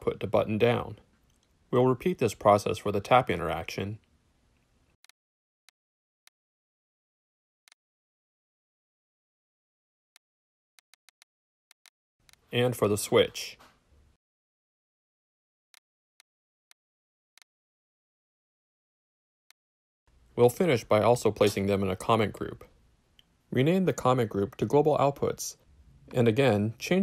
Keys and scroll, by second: 0.0-2.5 typing, 2.7 Return, 5.4-10.1 typing, 8.8 alt+shift+p, 8.9 shift+Return, 12.5 w, 14.1-15.7 typing, 17.9 alt+p, 17.9-19.2 typing, 23.0 ctrl+alt+c, 23.3 ctrl+alt+shift+Return, 23.7-25.9 typing.